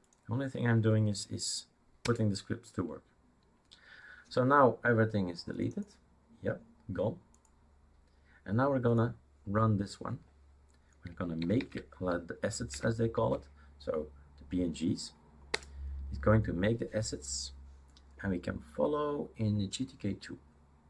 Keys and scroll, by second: 2.1 Return, 11.6 typing, 12.7 3, 13.1 Tab, 15.6 Return.